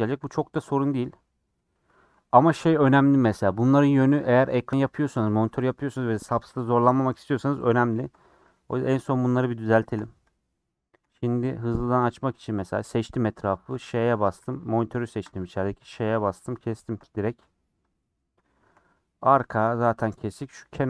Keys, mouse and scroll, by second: 0.0 Tab, 0.4 scroll down 4, 0.6 middle click, 1.2-1.7 scroll up 3, 1.7 Tab, 8.7-10.0 middle drag, 10.0 h, 10.4 click, 11.1 Tab, 11.2 middle click, 11.4-11.7 scroll up 3, 11.8 middle click, 12.2 3, 14.4 3, 14.6 click, 16.4-17.9 middle drag, 17.9 click, 18.1-19.3 middle drag, 19.3 3, 19.7 Left.